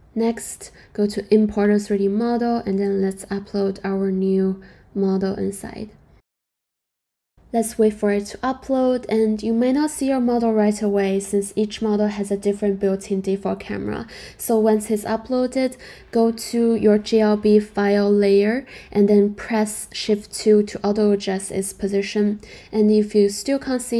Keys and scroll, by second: 19.5 shift+2.